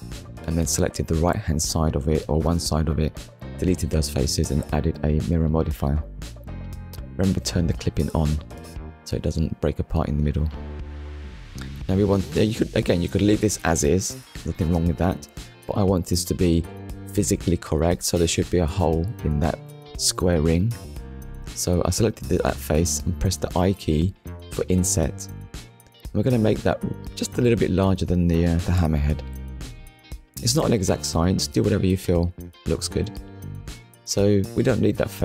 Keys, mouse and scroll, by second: 2.7 KP_1, 6.2 middle click, 9.3 click, 11.5 click, 20.4 middle click, 22.3 scroll up 1, 28.5 shift+click, 29.3 middle click, 30.0 scroll down 1, 33.1 click, 33.7 middle click, 34.9 z.